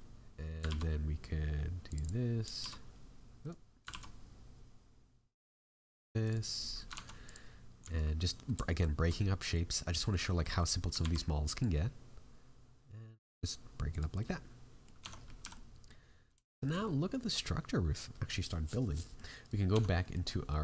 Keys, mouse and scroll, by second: 0.6 ctrl+r, 3.9 ctrl+r, 6.5 middle click, 6.9 ctrl+Tab, 7.8 alt+right click, 8.7 alt+shift+right click, 9.1 middle click, 9.8 middle click, 10.2 middle click, 10.5 middle click, 11.0 alt+e, 14.1 middle click, 15.0 Tab, 15.1 scroll down 6, 15.3 a, 15.5 middle click, 16.0 scroll down 1, 16.4 shift+middle click, 16.8 middle click, 19.4 right click, 19.7 Tab, 20.0 middle click, 20.2 scroll up 5, 20.5 middle click.